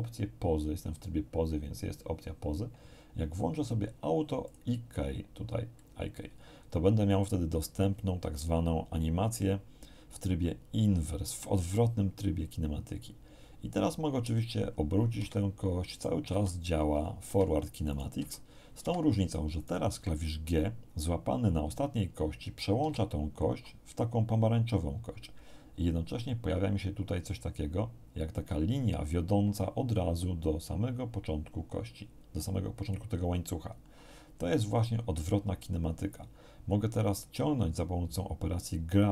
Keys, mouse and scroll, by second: 4.4 click, 14.2 r, 15.9 right click, 16.2 r, 17.2 Escape, 17.9 right click, 18.2 r, 18.8 Escape, 19.6 right click, 22.8 g.